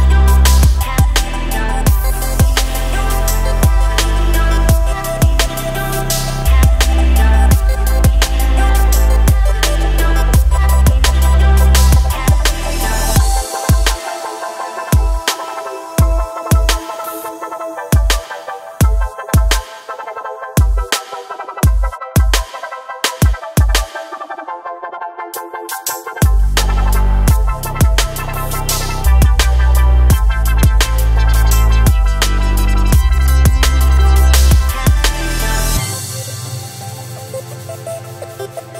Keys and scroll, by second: 14.3 g, 18.3 z, 24.2 KP_7.